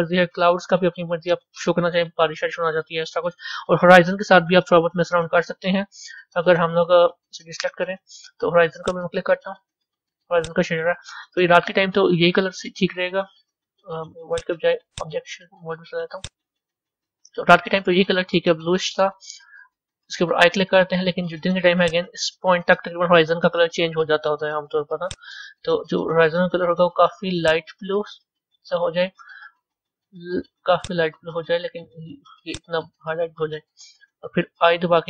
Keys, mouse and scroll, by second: 6.2-6.8 scroll down 2, 7.0 middle click, 7.5-8.1 scroll down 9, 8.7 click, 10.3 click, 16.1-20.5 drag, 21.8-27.3 drag.